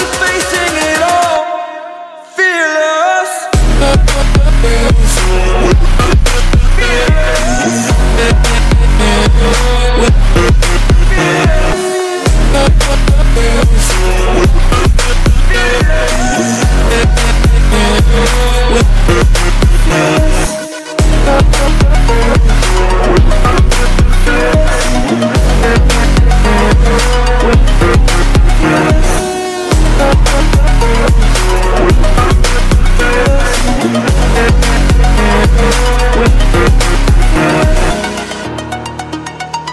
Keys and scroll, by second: 3.2 ctrl+z, 8.5 ctrl+z, 14.4 ctrl+g, 16.9 ctrl+t, 18.2 ctrl+u, 20.8 ctrl+t, 22.1 ctrl+j, 22.2 ctrl+t, 25.3 ctrl+j, 25.4 ctrl+t, 27.1 ctrl+l, 30.2 ctrl+t, 35.2 ctrl+l, 37.0 ctrl+j, 37.1 ctrl+t.